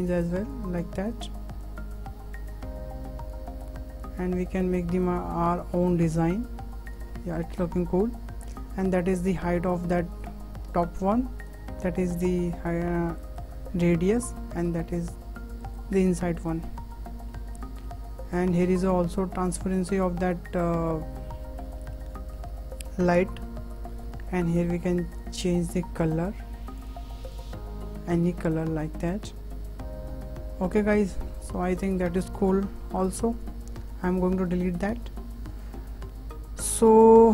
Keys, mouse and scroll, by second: 11.5-13.4 drag, 14.5-15.8 drag, 16.1-16.6 middle drag, 16.6-16.9 scroll up 1, 16.9-18.8 middle drag, 18.8 click, 21.1-21.4 scroll up 4, 21.4-23.1 shift+middle drag, 23.1-24.0 scroll down 7, 24.6 click, 26.8 click, 31.0 scroll down 1, 31.1-31.5 middle drag, 31.5 scroll up 4, 31.7-32.0 shift+middle drag, 32.0-32.9 scroll down 7, 32.9-33.2 shift+middle drag, 33.2 shift+click, 34.3 Delete, 34.5 Delete, 36.8 click.